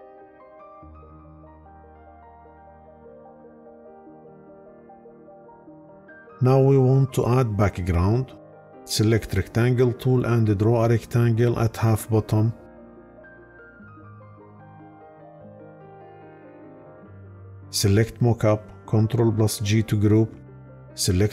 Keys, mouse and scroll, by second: 19.0 ctrl+g.